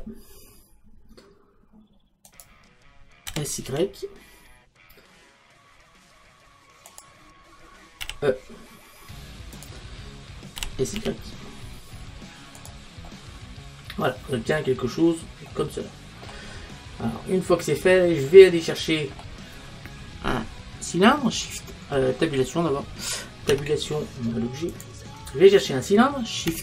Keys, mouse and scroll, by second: 2.4 click, 4.1 s, 7.0 click, 8.1 e, 9.7 click, 11.4 s, 12.7 click, 14.4 middle click, 15.0-20.6 middle drag, 23.5 Tab.